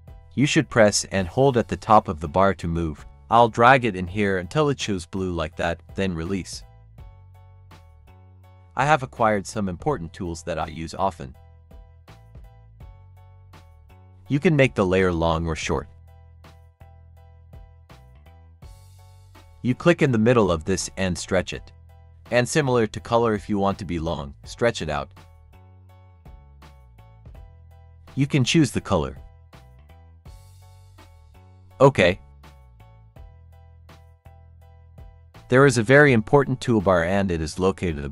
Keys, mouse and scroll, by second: 11.7-29.5 drag.